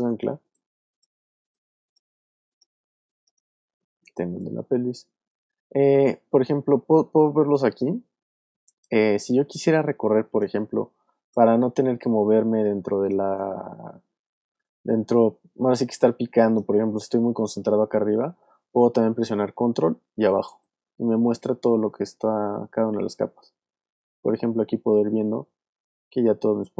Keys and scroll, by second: 0.5 space, 2.9 space, 9.5 alt+space, 10.3 space, 11.3 space, 19.8 super+Down, 23.4 super+Up, 24.0 super+Down, 25.4 super+Up, 26.2 super+Down.